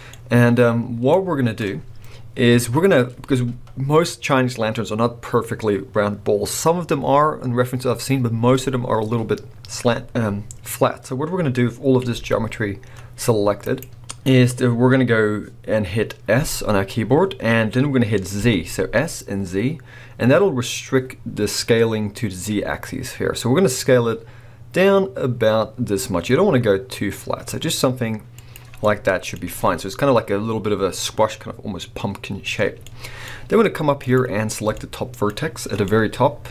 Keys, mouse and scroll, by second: 2.3 KP_1, 12.2 g, 13.8 right click, 16.4 s, 28.6 click, 28.8 scroll up 2, 28.8-33.2 middle drag, 33.2-34.0 scroll up 2, 34.0 click, 34.8-36.5 middle drag.